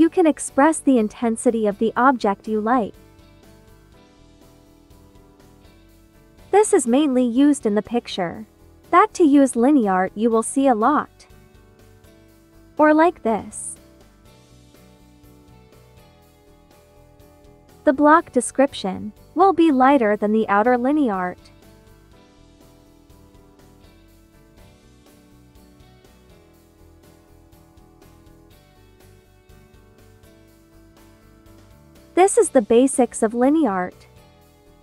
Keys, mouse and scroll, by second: 13.0 ctrl+z, 13.4-28.2 drag, 31.8 space, 31.9 click, 32.4 space, 33.5-34.8 drag.